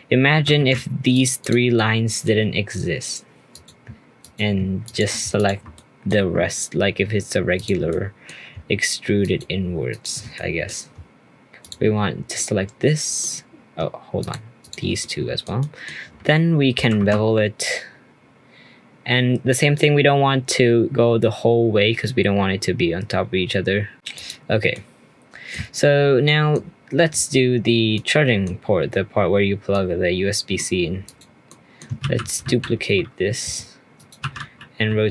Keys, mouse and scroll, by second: 0.5 ctrl+z, 1.1 click, 1.4 click, 1.7-3.5 middle drag, 3.5 click, 4.2 shift+click, 4.8 shift+click, 5.3 shift+click, 5.7-7.5 middle drag, 7.5 shift+click, 7.9 middle click, 8.6-9.2 shift+scroll up 1, 9.2 shift+click, 9.9 shift+click, 10.3-11.6 middle drag, 11.6 shift+click, 12.3-14.2 middle drag, 14.2 shift+click, 14.6 shift+click, 15.0-17.0 middle drag, 17.0 ctrl+b, 23.9 middle click, 24.1 click, 24.5 scroll down 1, 24.7-25.5 middle drag, 25.5-26.2 scroll down 3, 26.2-31.0 middle drag, 31.0 click, 31.4 middle click, 32.0 shift+d, 34.2 r.